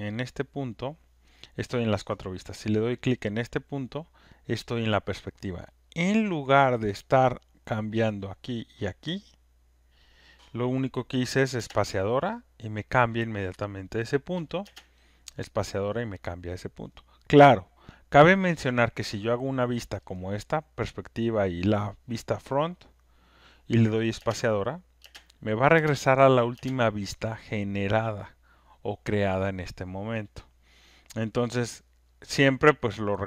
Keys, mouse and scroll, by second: 0.4 click, 2.3 click, 5.2 click, 6.0 click, 6.6 click, 7.0 click, 7.8 click, 8.7 click, 11.5 click, 14.6 space, 18.6 space, 18.8-19.8 drag, 23.4 click, 31.7 click, 32.3 click, 32.9 click.